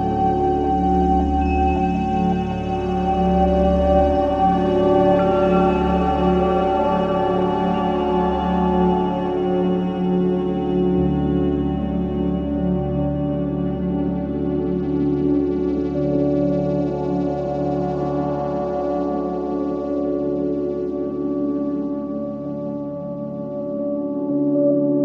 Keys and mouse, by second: 0.7 typing, 3.9 alt+a, 5.5 alt+a, 6.8-7.9 alt+shift+drag, 9.6 alt+shift+click, 13.3 c, 14.6-19.5 drag, 20.1 click, 21.9 Escape, 22.5 click.